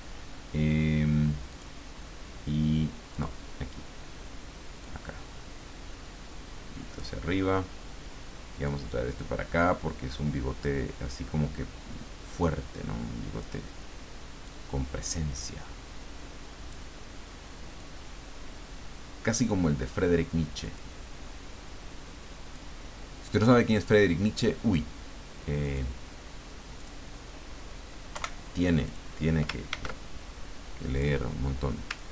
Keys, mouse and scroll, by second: 1.5 click, 3.1 click, 4.8-7.4 drag, 8.6-10.8 drag, 12.4-13.9 drag, 14.4-17.1 drag, 17.8-19.9 drag, 20.6 click, 22.5-24.2 drag, 25.6 click, 26.8 click, 28.1 Delete, 28.8 click, 29.7 ctrl+d, 30.9 click, 32.0-32.1 ctrl+drag.